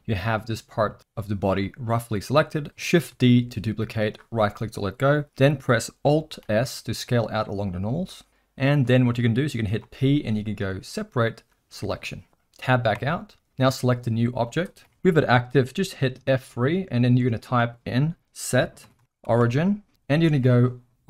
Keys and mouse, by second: 1.6 middle click, 3.1 shift+d, 6.4 alt+s, 9.8 p, 13.0 Tab, 13.7 click, 14.8 ctrl+z, 16.3 F3.